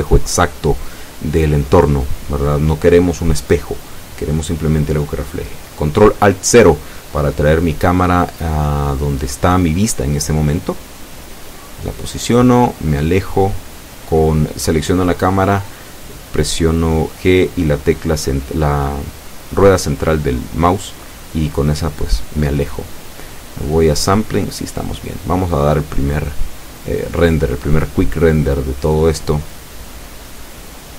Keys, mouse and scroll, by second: 0.6 click, 1.7 click, 3.4 KP_Decimal, 3.7 KP_4, 4.0 KP_Enter, 8.0-8.5 scroll down 2, 8.5-8.9 scroll down 1, 9.2 scroll down 2, 9.7 scroll up 2, 10.4 KP_0, 11.5 KP_0, 13.8 ctrl+alt+KP_0, 14.2 ctrl+alt+scroll up 2, 17.2 right click, 18.2 g, 20.0 click, 20.7 g, 20.9 middle click, 22.2 click, 22.7-23.1 scroll up 1, 25.8 middle click, 27.1 click, 27.8-28.5 scroll down 3.